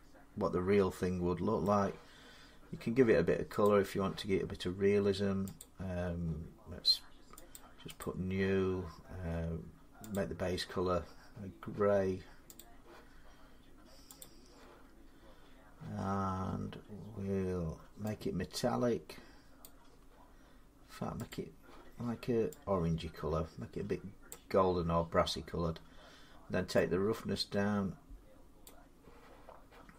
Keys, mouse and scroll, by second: 1.4 middle click, 3.5 click, 5.4 click, 7.4 click, 7.8 click, 9.9 click, 12.4 click, 14.0 click, 19.4 click, 21.1 click, 24.1 click, 28.4 click.